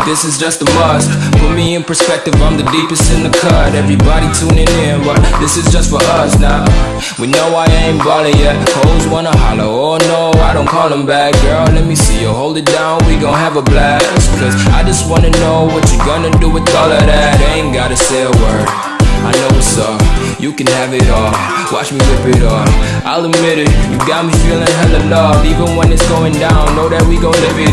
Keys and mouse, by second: 0.1 click, 1.5 right click, 2.2 click, 3.3 space, 3.5 click, 3.7 space, 4.7-6.1 drag, 9.9 ctrl+z, 13.0 click, 14.0-15.0 typing, 15.6 click, 16.9 [, 17.9 click, 20.9 ctrl+alt+z, 21.8 click, 22.5 ctrl+alt+z, 23.4 ctrl+z, 25.5 BackSpace, 26.5 right click.